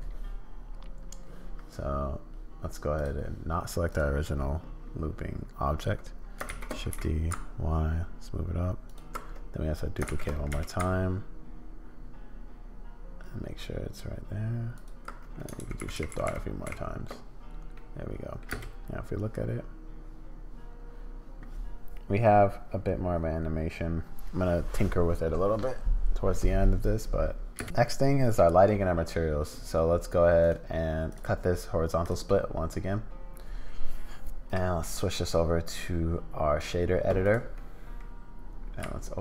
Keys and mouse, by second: 2.9 click, 3.9 click, 6.5 shift+d, 10.1 shift+d, 15.6-16.6 typing, 17.7 click, 18.5 space, 27.6 space, 30.4-32.2 drag, 34.6-36.7 drag, 37.6 middle click, 38.8 z.